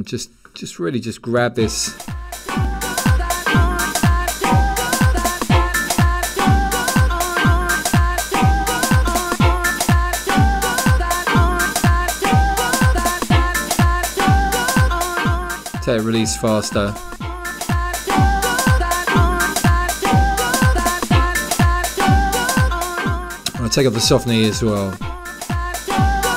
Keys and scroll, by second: 1.1 1, 2.4 1.